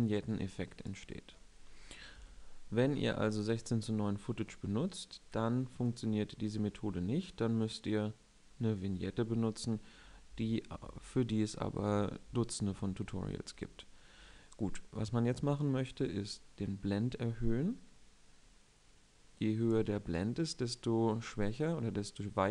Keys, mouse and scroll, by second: 1.8 KP_7, 2.8-3.4 scroll up 1, 5.6-7.1 drag, 20.9-22.5 middle drag.